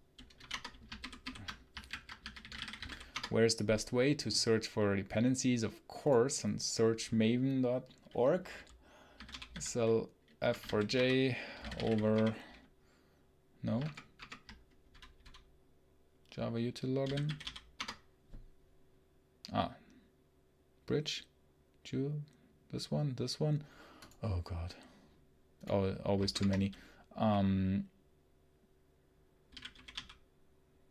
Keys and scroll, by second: 0.2 o, 0.4 Return.